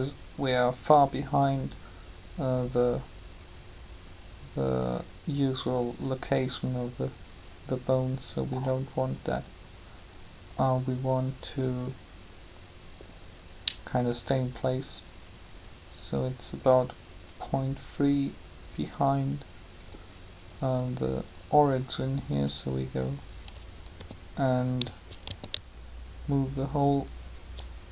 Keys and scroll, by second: 23.8 a, 25.2 shift+a.